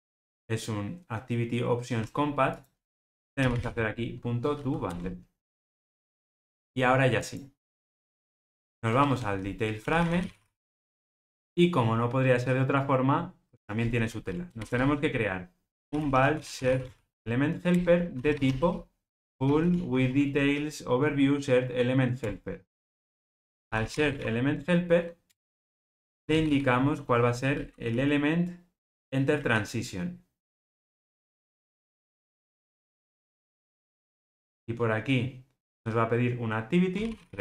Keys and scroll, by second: 4.9 Return, 17.7 Return, 22.2 Return, 25.3 Return, 33.0 Return.